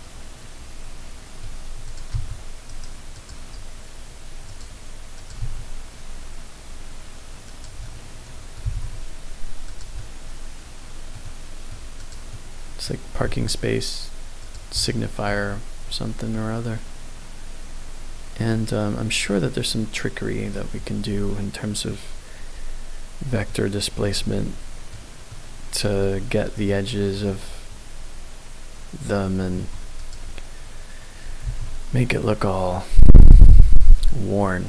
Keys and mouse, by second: 1.9 click, 2.1 s, 2.7 right click, 3.1 click, 4.4 click, 5.1 click, 5.4 s, 7.4 click, 7.8 middle click, 8.6 g, 8.7 z, 9.6 click, 9.9 middle click, 10.9 click, 11.2 middle click, 12.0 click, 12.3 middle click, 13.2 s, 14.4 click, 14.8 middle click, 15.3 Tab, 16.3-20.5 middle drag, 23.4-24.0 middle drag, 24.3-24.9 shift+middle drag, 25.3 middle click, 26.6 middle click, 29.5 Tab, 30.0 click, 31.4 ctrl+b.